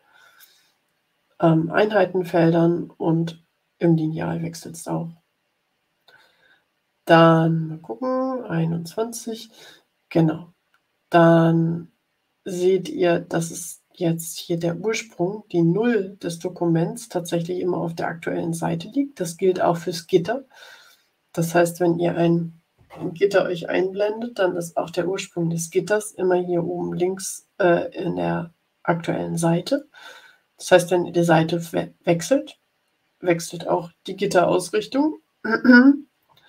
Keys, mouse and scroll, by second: 6.6 click, 20.6-22.1 scroll down 8, 31.8-32.8 scroll up 6, 34.1-34.8 scroll up 4, 35.6-36.0 scroll down 2, 36.1 scroll up 2.